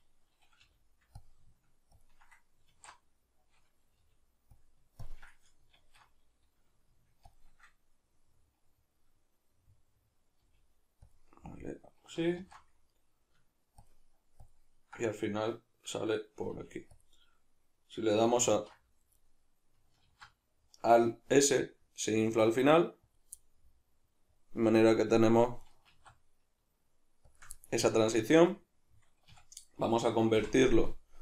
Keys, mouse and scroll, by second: 0.6 g, 1.3 click, 1.9 ctrl+click, 2.7 alt+q, 4.0 g, 5.0 ctrl+click, 5.8 alt+q, 7.3 ctrl+click, 8.1-11.1 middle drag, 10.4 g, 11.1 click, 11.2-13.8 middle drag, 12.4 alt+q, 13.8 ctrl+click, 14.4 ctrl+click, 16.5 g, 17.0 click, 18.5 ctrl+t, 19.3 right click, 20.0 alt+s, 23.2 click, 23.4-25.6 middle drag, 25.6 right click, 25.9 alt+s, 27.4 shift+click, 27.5-30.3 middle drag, 29.3 a, 30.3 v.